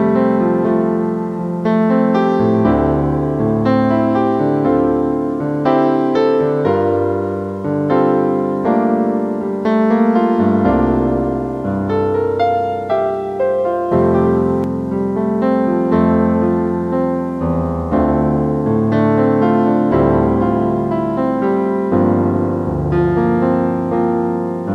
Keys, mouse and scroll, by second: 0.0-0.2 typing, 1.4 typing, 1.9 right click, 3.7 middle click, 6.0 typing, 8.8-12.0 typing, 13.5-14.3 typing, 15.1 right click, 17.8 typing, 19.1 typing, 20.7-22.2 typing.